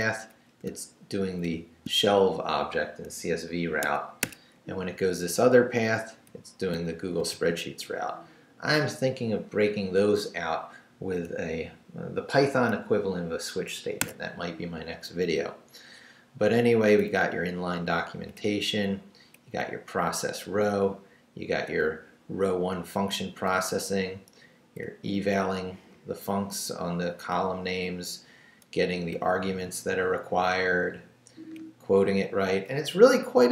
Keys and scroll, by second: 0.3 Up, 1.4 shift+v, 3.8 Escape, 4.5 Down, 6.3 Down, 7.2 shift+v, 13.7 Escape, 14.4 Down, 17.1 Down, 18.4 Down, 19.6 Down, 21.8 Down, 23.5 Down, 24.8 Down, 29.2 Down, 32.1 Up.